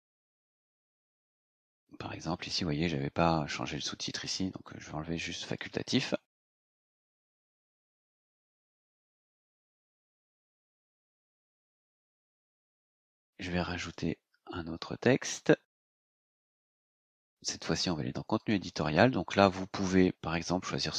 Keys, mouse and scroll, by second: 2.1 scroll down 2, 2.5 scroll up 2, 4.6 click, 6.2 BackSpace, 7.1-7.9 scroll down 4, 8.3 click, 10.0-11.0 scroll down 6, 12.2 click, 13.7 click, 16.7 click, 18.3 click.